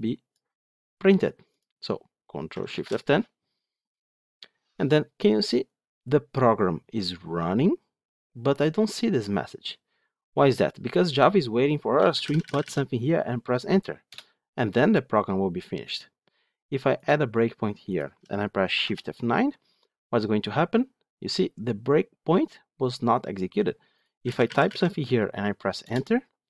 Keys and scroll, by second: 2.6 ctrl+shift+F10, 16.9 ctrl+F8, 18.6 shift+F9.